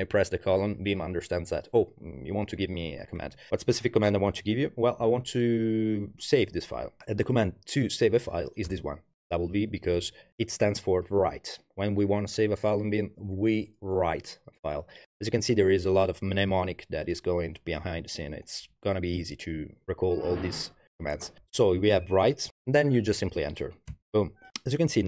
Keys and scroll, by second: 7.0 BackSpace, 8.7 w, 23.9 Return.